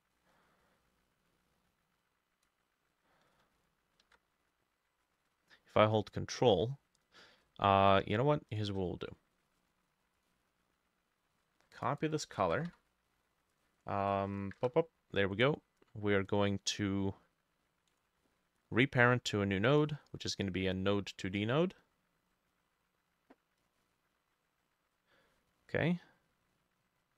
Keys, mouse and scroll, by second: 4.1 ctrl+z, 8.6 shift+click, 12.1 double click, 12.3 ctrl+a, 12.5 ctrl+c, 12.7 Escape, 14.6 Return, 15.4 right click, 18.0 right click, 23.8-27.1 drag, 25.4-26.0 scroll up 1.